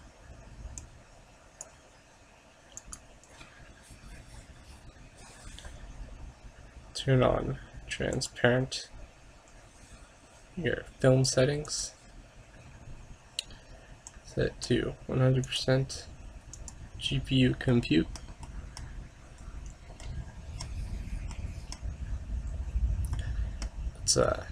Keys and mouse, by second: 0.9-2.6 drag, 2.9-4.5 drag, 7.4 middle click, 8.2-9.9 drag, 11.8-13.7 drag, 13.7 middle click, 14.2-17.5 drag, 17.8-24.5 middle drag.